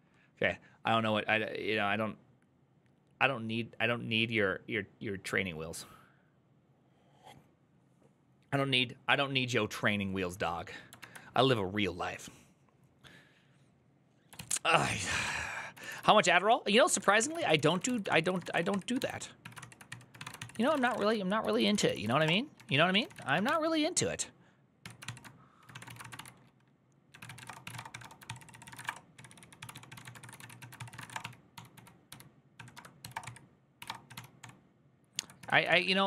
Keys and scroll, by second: 14.2 alt+{, 14.6-23.7 typing, 24.6 Tab, 24.8 ctrl+c, 25.4-36.0 typing, 35.2 Tab.